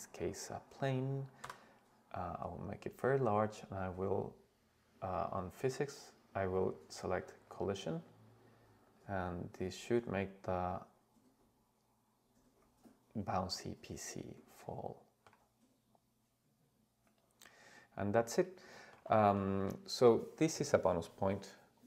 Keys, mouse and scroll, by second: 1.4 s, 2.3 click, 7.5 click, 8.9 click, 9.6 click, 13.0 scroll up 2, 13.7-15.6 middle drag, 15.7-16.7 scroll down 1, 17.3 click, 17.8 scroll down 1, 18.7 shift+middle drag, 19.2 middle drag.